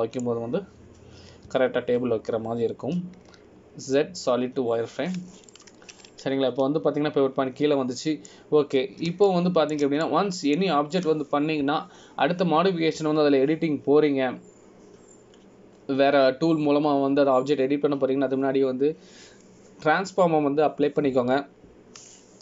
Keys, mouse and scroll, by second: 0.9-1.5 scroll down 2, 1.5 middle click, 3.6 Tab, 5.1 z, 7.7 middle click, 10.7-11.2 scroll up 1, 11.4 shift+middle click, 12.2 middle click.